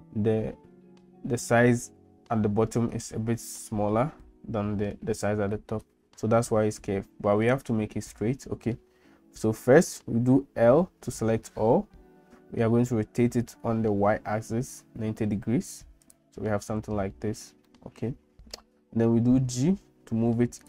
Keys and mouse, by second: 10.8 l, 13.2 r, 17.8 middle click, 19.3 g.